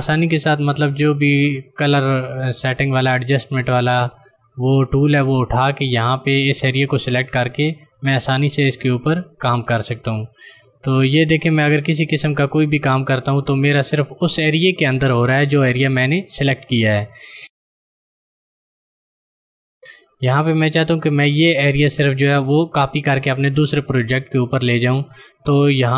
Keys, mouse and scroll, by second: 2.5 click, 4.5 click, 17.3 click, 18.2 ctrl+click.